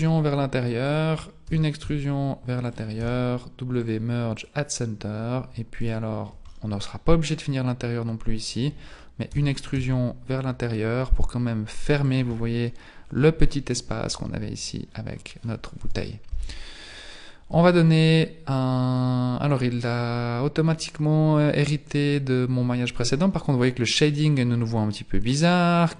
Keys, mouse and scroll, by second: 1.5 e, 3.0 w, 5.8 alt+right click, 6.5 middle click, 9.3 e, 12.3 middle click, 13.0-14.0 scroll up 1, 14.0 scroll down 1, 14.1-14.9 scroll down 5, 14.9-15.4 scroll down 3, 15.8 KP_1, 17.5 Tab, 19.7 click, 25.3 click.